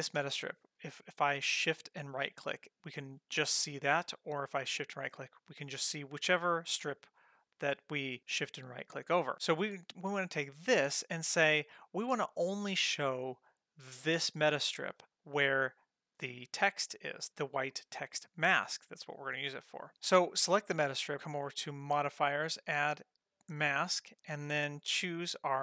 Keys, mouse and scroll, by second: 2.1-4.0 shift+drag, 2.1 shift+right click, 4.5-5.9 shift+drag, 4.5 shift+right click, 6.3-7.1 shift+right drag, 7.5-9.3 shift+right drag, 9.5-15.0 shift+right drag, 15.4-17.3 shift+right drag, 19.4 click, 20.4 click, 21.9 click, 22.5-23.6 drag, 24.3-25.6 drag.